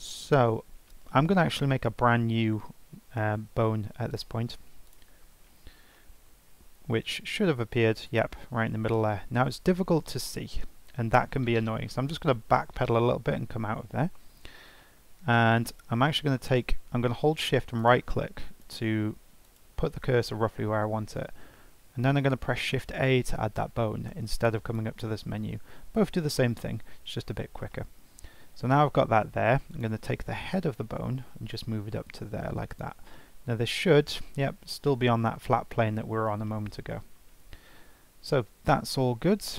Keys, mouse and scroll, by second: 1.4-1.8 scroll down 2, 1.8-2.1 scroll up 2, 4.1-5.4 drag, 5.4-5.9 scroll down 8, 5.9 shift+middle click, 6.2-7.2 shift+scroll up 6, 7.2 g, 9.4 scroll up 4, 10.5-12.2 scroll down 1, 12.2 ctrl+z, 12.7 ctrl+z, 14.8-17.8 shift+middle drag, 17.8 shift+right click, 18.6 shift+right click, 19.4 shift+right click, 21.7 shift+a, 24.6-27.7 drag, 27.7 shift+middle click, 28.2-28.7 scroll up 2, 28.7 scroll down 1, 28.9 shift+middle click, 29.7 click, 30.6 g, 33.1 scroll down 1, 33.1-35.8 middle drag, 36.5 shift+middle click, 36.8-37.3 scroll up 3, 37.9-38.2 scroll down 1, 38.2-39.5 scroll up 2.